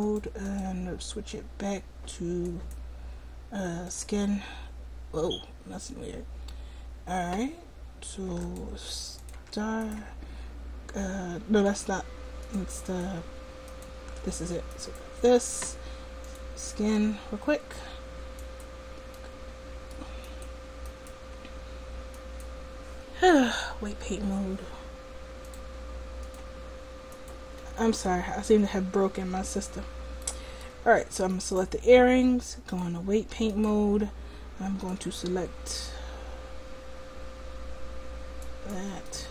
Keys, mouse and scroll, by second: 5.1-6.5 right drag, 6.5 middle click, 8.5-9.9 right drag, 11.3 right click, 12.5-14.9 drag, 18.6-22.4 drag, 19.2-22.4 middle drag, 23.8 middle click, 25.5 click, 29.9 middle click, 31.4 click, 31.4-32.7 right drag, 32.7 click, 33.2-36.4 drag.